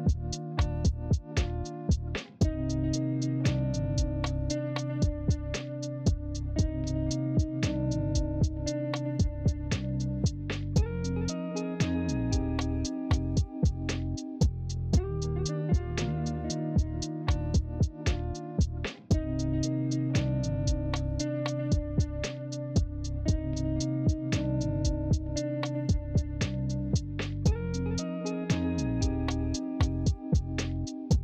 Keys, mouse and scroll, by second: 12.2-13.4 alt+scroll up 3, 13.5 alt+scroll, 13.9 ctrl+z, 16.7-17.4 alt+scroll up 3, 17.4 alt+scroll, 17.5 ctrl+z, 28.7 ctrl+c, 28.9 ctrl+f.